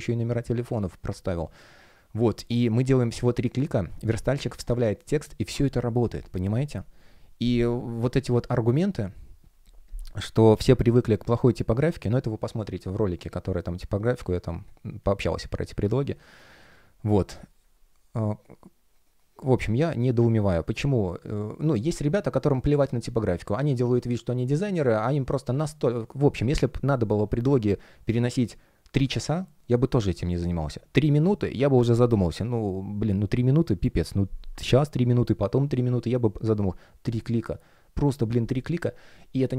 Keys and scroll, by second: 10.9 super+\, 13.1 space.